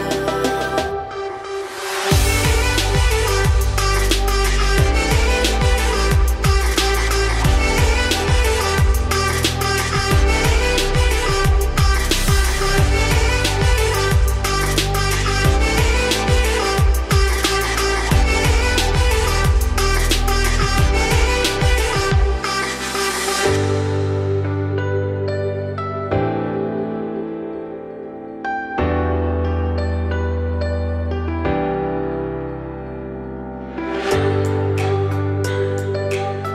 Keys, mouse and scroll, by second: 0.0 3, 0.2 click, 0.8 ctrl+click, 1.2 middle click, 1.4-1.7 scroll up 2, 1.7 shift+d, 2.9 p, 3.5 Tab, 3.7 click, 3.9 Tab, 4.3 middle click, 4.7 2, 4.9 click, 5.6 shift+click, 6.3 ctrl+x, 6.6 a, 6.8 middle click, 7.1 `, 7.7 z, 8.8 shift+middle click, 9.4 e, 13.6 g, 14.4 z, 14.7 scroll down 2, 14.8 middle click, 15.3 scroll up 2, 15.8 middle click, 16.4 a, 17.5 click, 17.8 3, 18.0 click, 18.4-19.4 middle drag, 19.4 shift+d, 20.4 p, 21.0 Tab, 21.2 click, 21.4 Tab, 21.9 a, 22.5 s, 24.9 scroll up 1, 25.1 s, 28.0 g, 29.0 shift+middle click, 29.3 s, 31.3 s, 34.5 g.